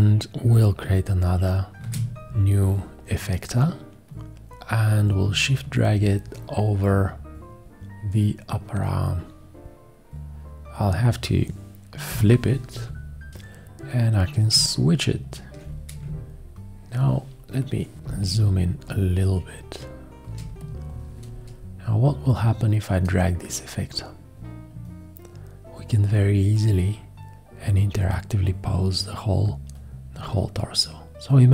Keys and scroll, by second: 1.8 shift+F1, 12.1 h, 16.0 ctrl+space.